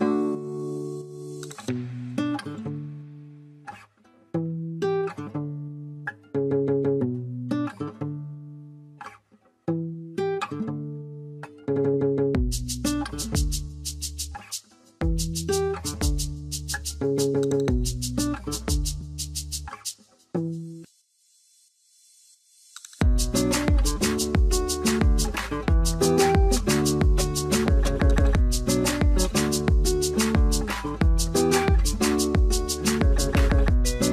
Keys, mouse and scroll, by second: 1.0 right click, 2.1-3.9 scroll up 1, 3.9 middle click, 4.2 shift+c, 4.4 shift+scroll up 1, 4.8 F3, 5.2 scroll up 1, 5.7 double click, 9.3 double click, 9.8-10.8 scroll down 1, 10.8 3, 11.1 0, 11.5 Return, 12.5 middle click, 12.9 scroll down 1, 14.0 scroll down 1, 14.3 middle click, 15.4 F3, 15.8 shift+click, 18.1 shift+click, 18.9 scroll down 1, 20.7-21.6 typing, 22.6 double click, 22.7-23.8 scroll up 1, 25.0-25.9 typing, 25.0 alt+scroll down 1, 25.1 middle click, 25.6 scroll down 1, 28.2 shift+click, 30.8 alt+middle click, 31.0 scroll down 1, 31.3 middle click, 33.2 alt+w, 33.4 ctrl+s.